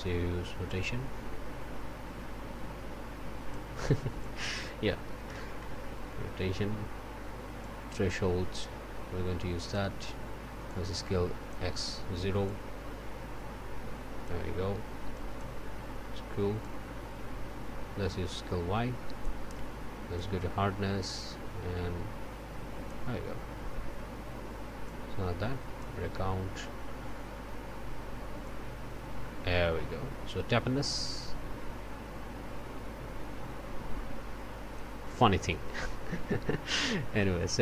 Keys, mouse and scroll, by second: 0.6-3.7 drag, 4.2 click, 5.2 9, 5.7 Return, 7.6-9.9 drag, 10.7-11.7 drag, 12.4-14.4 drag, 15.1 click, 16.6-19.4 drag, 20.1-23.1 drag, 24.8-26.0 drag, 28.4-35.0 drag.